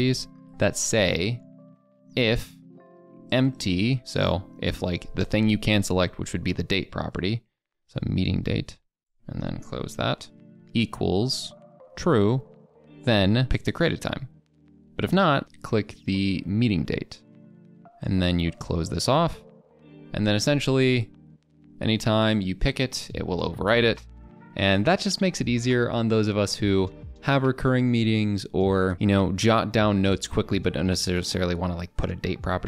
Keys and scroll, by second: 19.7 ctrl+Return.